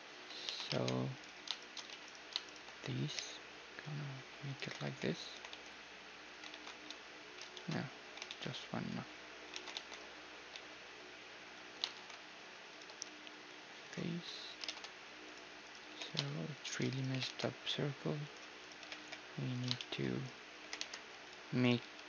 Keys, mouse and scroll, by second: 0.5 z, 0.7 ctrl+Tab, 1.5-4.5 right drag, 1.9 z, 3.2 i, 4.2 middle click, 4.6 w, 5.4 w, 6.6 ctrl+e, 7.5 ctrl+z, 8.3 ctrl+z, 8.8 w, 9.6 ctrl+e, 10.6 x, 11.9 alt+shift+s, 12.9 x, 14.3 middle click, 14.7 ctrl+Tab, 15.7-22.0 right drag, 15.9 g, 17.1 g, 18.9 g, 19.8-21.6 drag, 20.6 g, 21.9 g.